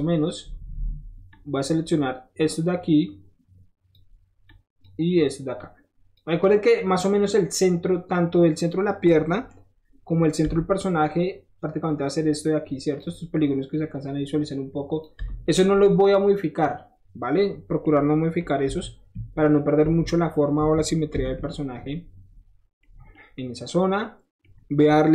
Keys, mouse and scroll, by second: 1.3 click, 2.4-4.0 drag, 4.5 click, 5.6 click, 6.4 middle click, 6.9 middle click, 7.7 middle click, 7.8-9.6 middle drag, 9.6-10.8 middle drag, 10.5 7, 11.6-13.0 drag, 13.7-15.0 drag, 15.5 scroll down 1, 15.6-17.8 middle drag, 18.7 KP_1, 19.1 KP_3, 19.8 KP_1, 21.1 ctrl+s, 21.7 middle click, 21.9 middle click, 24.8 middle click.